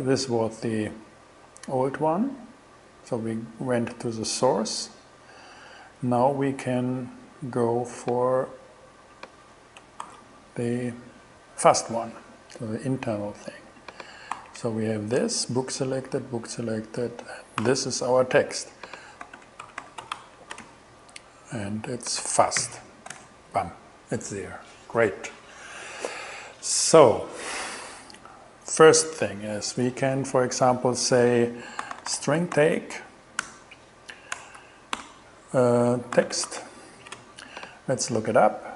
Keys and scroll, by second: 10.1 super+c, 14.4 super+v, 17.6 alt+6, 19.0-21.5 typing, 22.6 shift+,, 23.2 shift+Return, 31.4-33.5 typing, 33.4 shift+Return, 33.8 alt+$, 34.4 alt+BackSpace, 35.0 alt+5, 36.0-37.5 typing.